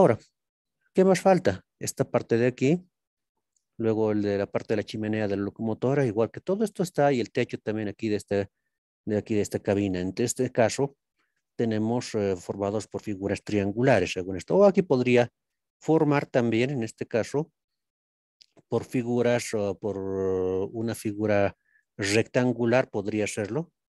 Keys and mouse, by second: 0.8 shift+middle click, 1.0 shift+click, 1.0 shift+middle click, 1.1 shift+click, 3.4 shift+click, 3.6 shift+middle click, 3.6 shift+click, 3.8 shift+middle click, 15.7 middle click.